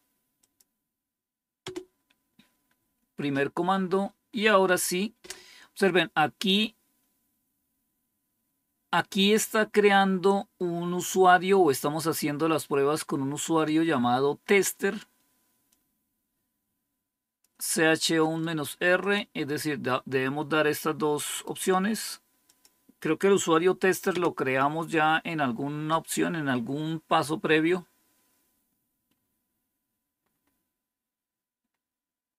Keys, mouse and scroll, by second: 0.3 click, 1.5 Return, 15.6-17.3 drag, 18.1 right click, 18.9 click, 21.2 right click, 22.3 click, 24.0 Return, 30.1-31.2 scroll up 2, 31.2-31.7 scroll down 3, 32.1 scroll down 2.